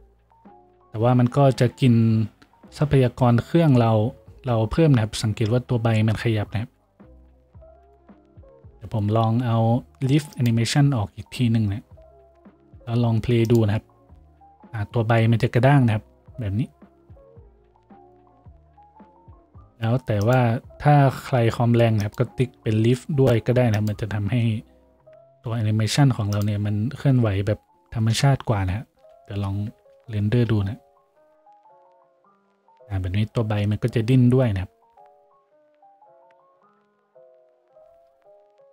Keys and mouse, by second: 8.4 F6, 8.4-38.7 drag, 11.9 F6, 22.6 F6, 30.4 shift+z.